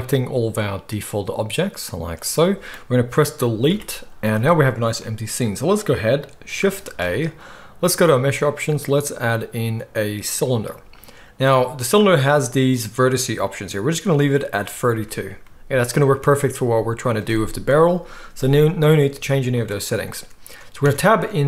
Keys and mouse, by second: 3.7 Delete, 6.8 shift+a, 11.9-21.4 drag, 20.8 Tab.